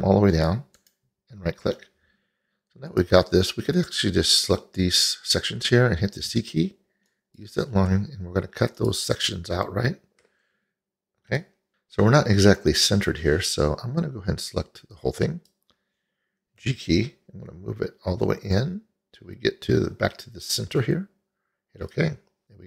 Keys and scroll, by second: 6.4 c, 16.7 g.